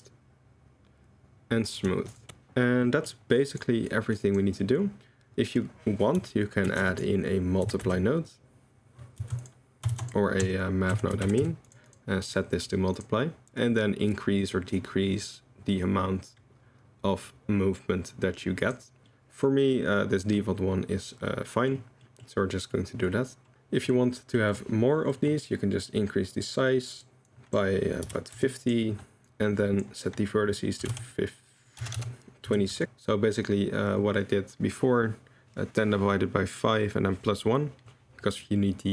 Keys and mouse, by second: 2.2 click, 2.9 drag, 3.4 drag, 4.0 click, 4.7 click, 6.6 shift+a, 9.9 shift+a, 12.3 drag, 13.0-18.7 drag, 19.1-21.6 middle drag, 21.7 click, 22.0 drag, 22.8 middle click, 23.5-23.8 middle drag, 24.3 middle drag, 25.1 middle click, 26.0-27.1 drag, 27.2-32.8 drag, 32.0 BackSpace.